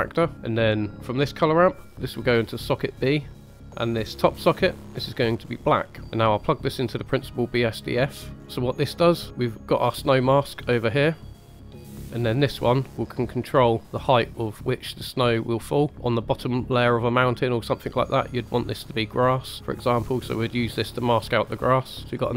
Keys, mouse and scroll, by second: 1.3 click, 2.5-3.3 drag, 4.7 click, 6.3-8.0 drag, 8.3 middle click, 8.3 scroll up 2, 10.1 middle click, 11.3 click, 11.7 click, 12.0-12.4 middle drag, 12.4-13.2 drag, 13.8-15.9 drag, 19.8-20.7 drag, 21.2-22.0 drag.